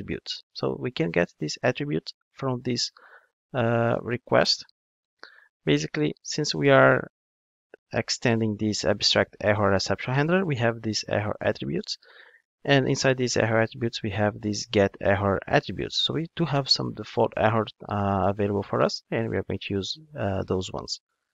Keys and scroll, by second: 12.1 super+b, 18.5 ctrl+Tab.